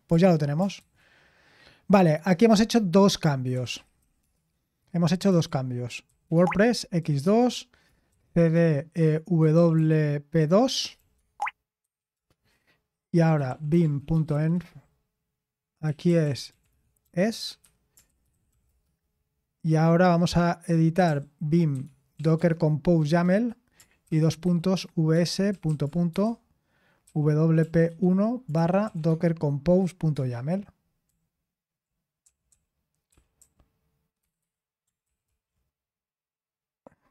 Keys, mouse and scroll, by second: 0.7 ctrl+c, 3.3-19.1 typing, 20.8-35.5 typing.